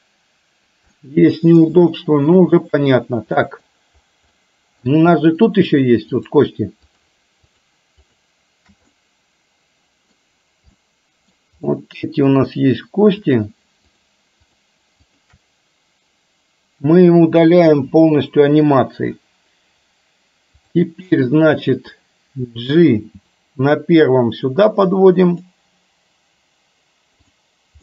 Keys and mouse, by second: 1.0-1.8 middle drag, 2.0-2.4 shift+middle drag, 3.5 middle click, 4.5-4.9 middle drag, 5.4 middle click, 6.3 click, 7.0 shift+click, 7.6 shift+click, 8.1 shift+click, 9.0-10.3 middle drag, 10.9-11.5 middle drag, 11.8-12.4 middle drag, 13.3 shift+click, 14.0 shift+click, 14.4 shift+click, 15.1 shift+click, 17.8 Delete, 20.6 click, 23.1 g.